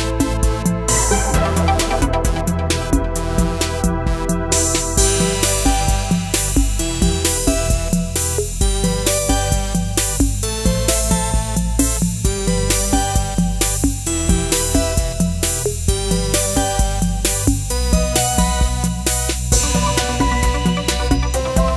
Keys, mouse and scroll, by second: 0.0 click, 6.7-16.8 drag, 16.8 click, 20.4 click.